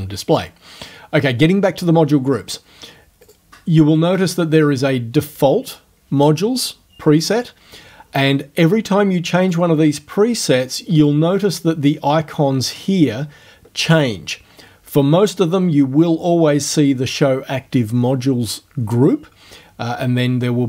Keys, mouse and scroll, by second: 3.3 click, 7.2 click, 9.5 click, 11.0 click.